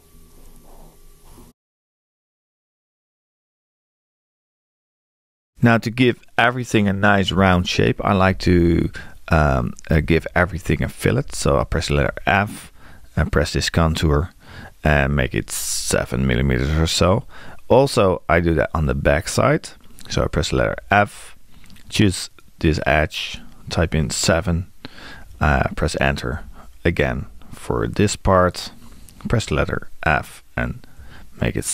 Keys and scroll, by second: 12.0 f, 15.2 7, 20.5 f, 23.8 7, 31.0 7.